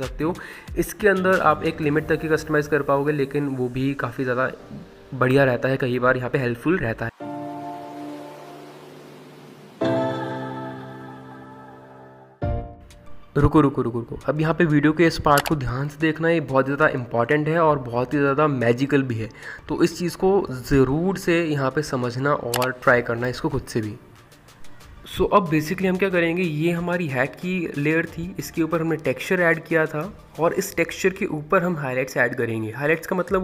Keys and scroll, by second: 8.1 ctrl+t.